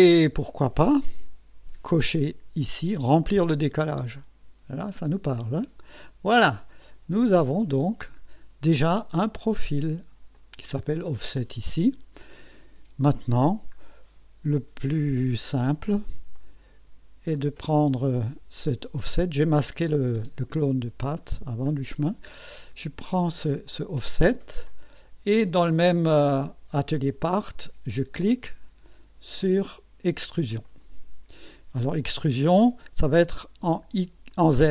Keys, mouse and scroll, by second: 3.3 click, 4.7-5.5 scroll down 6, 5.5 scroll up 2, 6.8 click, 7.6-8.0 scroll down 2, 9.3 scroll down 2, 10.4 click, 11.8 scroll down 2, 13.8 scroll up 2, 16.4 click, 17.4 click, 17.9 space, 20.2 space, 20.9-21.3 scroll up 1, 21.3 middle click, 21.8 scroll up 1, 23.7 click, 30.7 click.